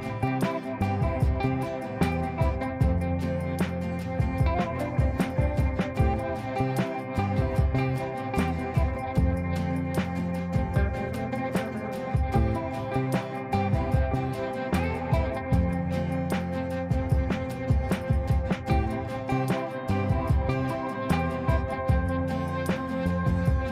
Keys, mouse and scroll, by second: 4.3 l, 5.5 shift+click, 6.3 l, 7.6 shift+click, 8.5 l, 9.8 shift+click, 10.8 l, 13.4 shift+click, 14.3 l, 15.8-20.1 drag, 21.2 F3, 21.5 F2, 22.0-23.7 drag.